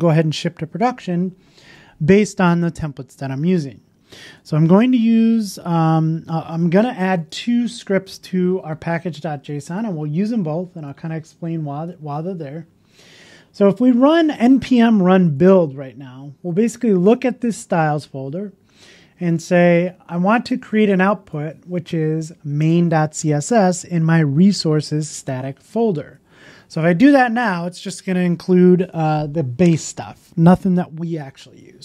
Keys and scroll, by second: 6.6 super+c, 8.4 super+w, 12.0 super+v.